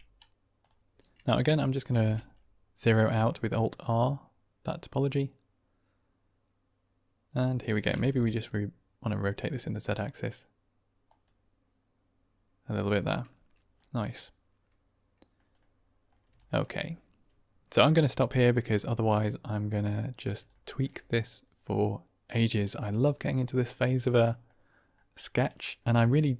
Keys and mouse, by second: 0.5 click, 3.0 alt+r, 3.8-7.6 middle drag, 7.8 r, 10.5 z, 13.7-15.2 middle drag, 15.5-16.0 middle drag, 16.3 shift+middle drag, 18.0-18.5 middle drag, 20.4-20.7 shift+middle drag, 21.5-22.2 middle drag, 23.8-24.2 middle drag, 24.4-24.8 middle drag, 25.5-26.1 middle drag.